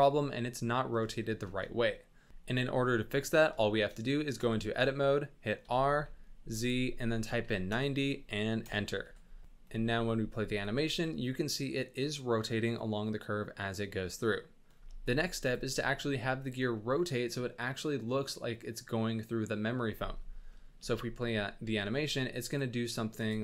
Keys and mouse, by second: 1.2 shift+middle drag, 1.9 middle drag, 2.3 KP_7, 2.3 z, 2.3 n, 3.7 shift+middle click, 4.3 Tab, 5.6 r, 9.0 Tab, 9.2 space, 10.4 shift+space, 10.5 shift+middle drag, 14.0-14.6 middle drag, 14.7 space, 15.4 click, 20.5 middle drag, 20.8 space, 21.8 middle click, 22.6 click.